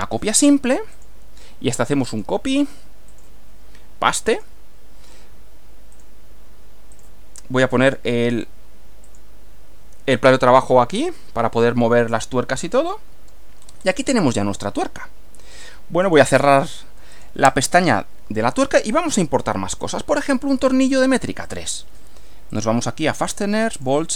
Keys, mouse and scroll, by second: 1.0 click, 2.1 click, 3.1 click, 4.3 click, 5.9 click, 6.9 click, 7.9 click, 9.1 click, 10.9-12.0 middle drag, 12.3-13.5 middle drag, 16.1 click, 17.1 click, 19.9 click, 21.5 click, 22.5 click, 23.7 click.